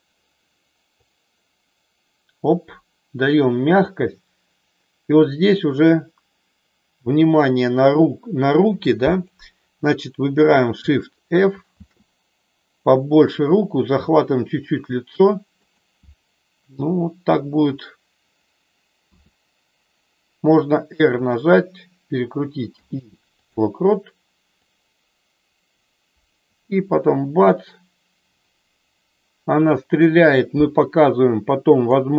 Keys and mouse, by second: 1.1-9.3 drag, 11.7 shift+f, 15.6 click, 19.1 r, 22.6 i, 24.7-32.0 drag.